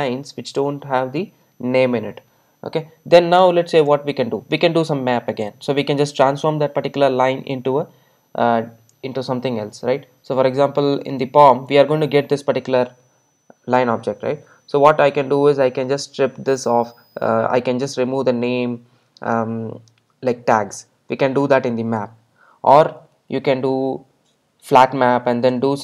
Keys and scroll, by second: 5.5 Return.